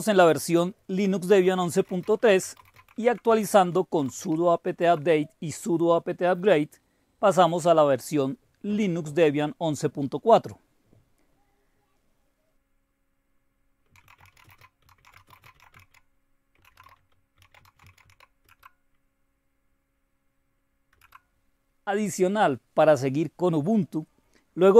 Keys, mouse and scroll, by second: 0.7 Return, 0.7-4.7 typing, 6.3-7.1 typing, 8.2-10.3 drag, 13.6-18.5 typing, 20.4-20.9 typing.